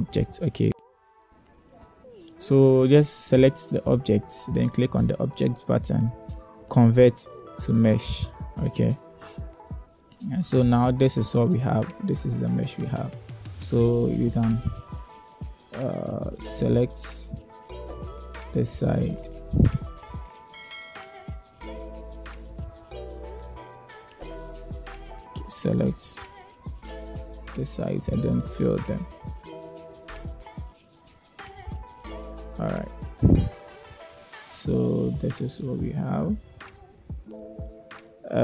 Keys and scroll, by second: 0.8 space, 9.7 1, 10.8 Tab, 15.2 2, 16.9 1, 20.7 7, 24.4 space, 25.3 alt+z, 28.8 f, 29.4 Tab, 30.1 space, 30.2 x, 32.4 alt+z.